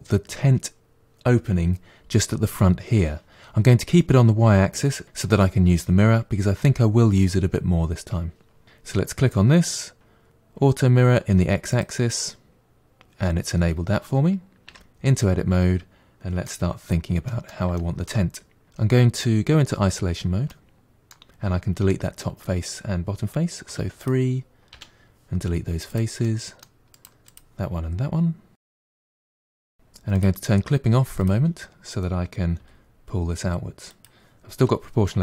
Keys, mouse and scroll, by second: 8.6 click, 11.7 click, 14.7 Tab, 15.2-16.8 middle drag, 16.8-17.3 scroll up 3, 17.3-19.9 middle drag, 19.9 KP_Divide, 20.5-23.5 middle drag, 23.7 3, 24.0 click, 24.7 Delete, 26.3 middle click, 27.0 click, 27.3 click, 28.7 Delete, 29.1 middle click, 29.7 1, 30.1 click, 31.2 click, 32.6 g.